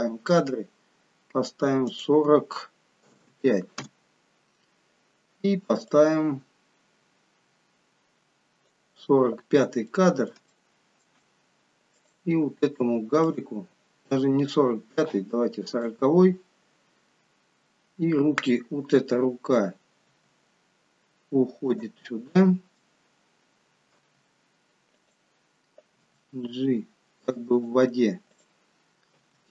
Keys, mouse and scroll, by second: 1.9 click, 5.9 click, 9.9 middle click, 10.5 shift+middle click, 12.0 click, 13.2 click, 20.1 g, 22.0 middle click, 24.0 r, 26.0 g, 28.2 click, 29.1 r.